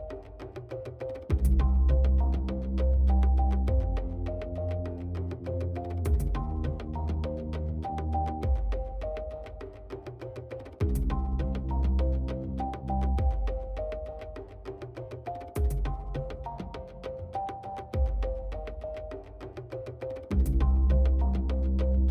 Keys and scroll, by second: 7.5-8.6 typing, 13.2-14.9 typing, 18.3 f.